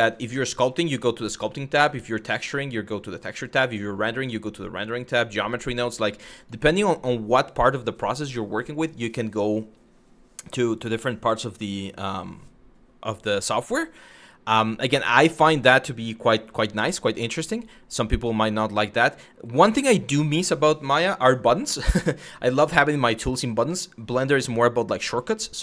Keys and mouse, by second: 0.1 click, 3.3 click, 4.8 click, 6.0 click.